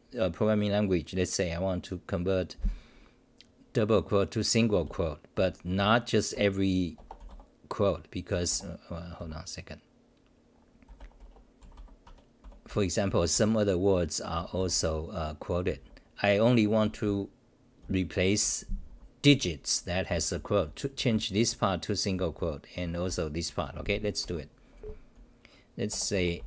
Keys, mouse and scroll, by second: 4.8 c, 6.1-6.8 typing, 8.3 Home, 8.5 f, 9.2 l, 10.6-13.8 typing, 12.0 Home, 15.7 c, 17.8 h, 19.0-22.9 typing, 24.2-26.4 typing.